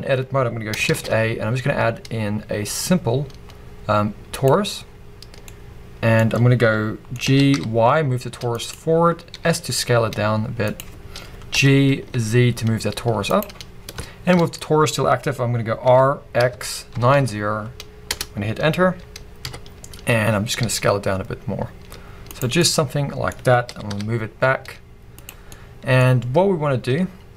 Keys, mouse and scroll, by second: 0.9 shift+a, 4.8-5.5 scroll down 2, 5.5-7.2 middle drag, 7.2 g, 8.7 click, 8.9-9.3 scroll down 1, 9.3 s, 10.8 click, 11.5 g, 13.4 click, 13.6-15.8 scroll up 1, 15.8 r, 19.4 KP_1, 20.0 scroll up 1, 20.6 s, 22.4 click, 22.6 middle click, 23.7 g, 25.3 click, 25.5 middle click, 26.0-27.3 scroll up 1.